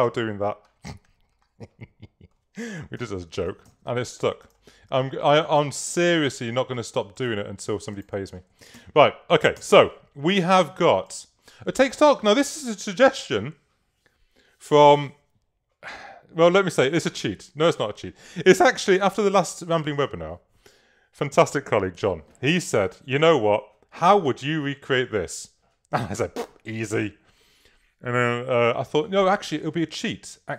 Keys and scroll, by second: 8.8 super+-, 9.6 super+1.